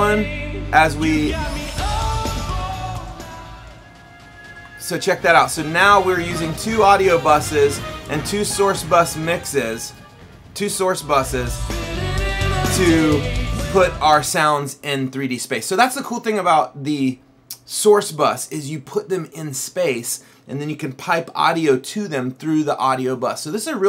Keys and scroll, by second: 1.8 Up, 3.1 Left, 3.6 Up, 5.4 Left, 8.1 Up, 11.8 Right, 12.5 Down.